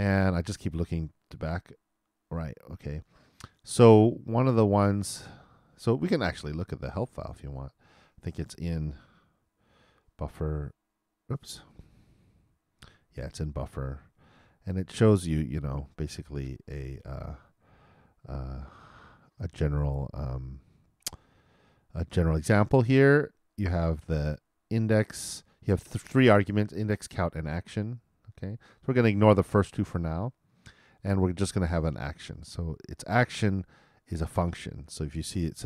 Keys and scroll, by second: 9.8 super+d.